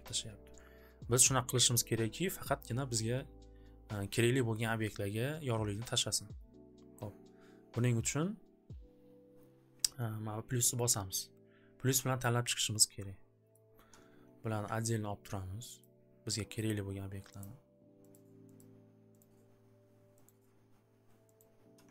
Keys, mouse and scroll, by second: 7.0 click, 10.7 click, 13.5 click, 15.8 ctrl+click, 16.6 ctrl+click, 17.4 ctrl+click, 20.2 ctrl+click, 21.3 ctrl+click.